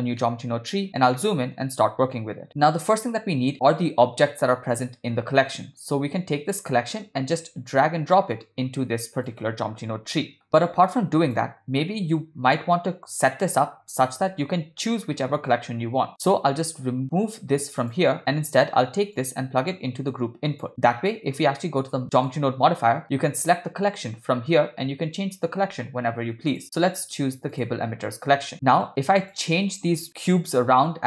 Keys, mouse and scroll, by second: 0.2-1.1 ctrl+middle drag, 1.2 shift+middle click, 2.5 click, 7.7 click, 7.9 click, 10.2 middle click, 10.5-11.5 drag, 17.8 click, 19.2-20.7 drag, 22.2 click, 26.5-27.7 drag, 29.2 click, 30.1 g.